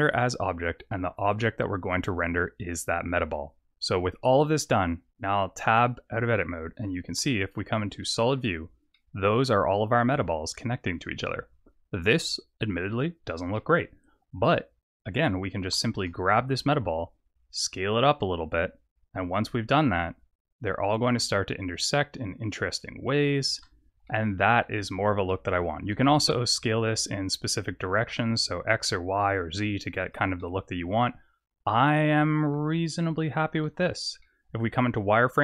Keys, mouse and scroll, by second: 1.3 click, 5.9 Tab, 7.2 z, 8.0 middle click, 8.9 middle click, 11.5-12.4 scroll up 2, 12.9-13.5 scroll down 1, 13.5 middle click, 14.0 scroll down 2, 14.9 click, 15.8 s, 24.0 middle click, 25.3 middle click, 25.9 s, 30.4 middle click, 33.6 z, 34.2 middle click.